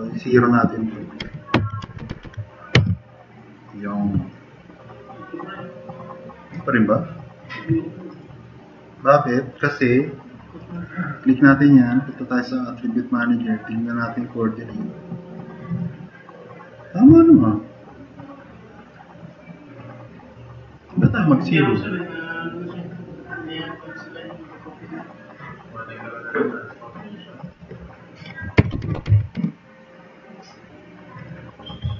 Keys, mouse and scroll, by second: 1.3-2.2 typing, 1.6 Tab, 2.0 Tab, 2.8 Return, 4.3-4.7 drag, 5.3 Tab, 28.7 Tab, 28.7 0, 28.8 0, 29.0 Tab, 29.1 0, 29.4 Return, 31.7 typing.